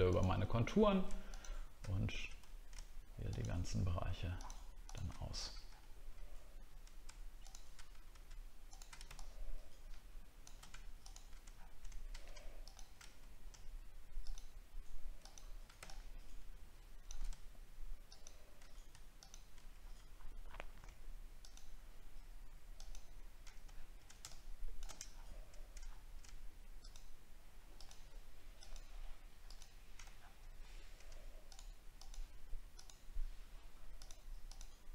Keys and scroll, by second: 2.4 alt+scroll up 1, 11.4 alt+scroll down 1, 19.8 alt+scroll up 1, 20.4 alt+scroll up 1, 23.7 alt+scroll down 1, 25.0 alt+scroll down 1, 26.0 alt+scroll up 1, 30.1 alt+scroll down 1.